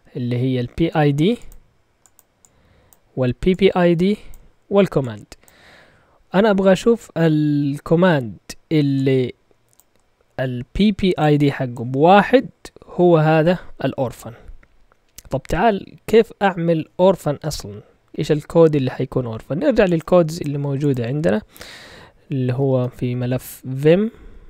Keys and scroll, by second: 22.2-23.6 typing.